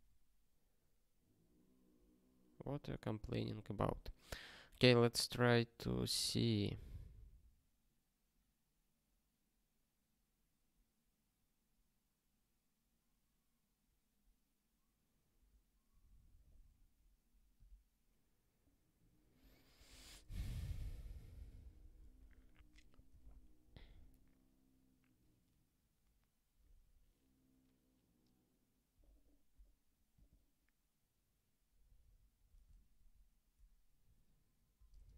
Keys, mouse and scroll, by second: 17.5 q, 20.0 ctrl+j, 22.5 super+o, 23.2 super+w.